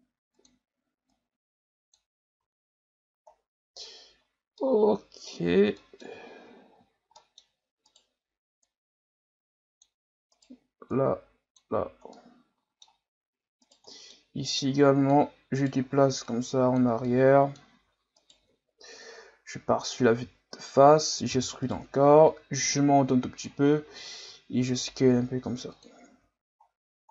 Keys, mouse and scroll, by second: 1.1-2.3 drag, 2.3 Tab, 2.6-3.1 scroll down 5, 3.1-3.8 scroll up 5, 4.2-4.6 scroll down 2, 4.6-5.4 middle drag, 5.4-5.7 scroll up 3, 5.7-6.2 middle drag, 6.2 scroll down 3, 6.5 scroll up 1, 6.8 Tab, 7.2 middle click, 7.9 right click, 8.6-10.3 drag, 10.3 right click, 10.9-12.1 drag, 12.1 middle click, 13.0-13.6 scroll up 1, 13.6 right click, 13.9 middle click, 14.4 click, 15.5 right click, 16.3 click, 17.1-18.2 middle drag, 18.2 alt+right click, 18.9 KP_1, 19.7 scroll down 6, 20.3-20.8 scroll up 4, 21.3 e, 22.3-23.7 drag, 23.7 scroll up 1, 24.3 s, 26.1 Tab, 26.6-27.1 scroll down 10.